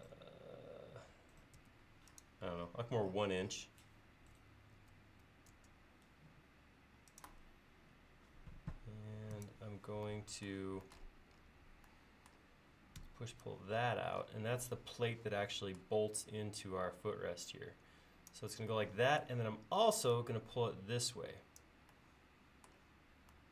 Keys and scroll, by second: 1.6 l, 4.8 1, 13.1 p.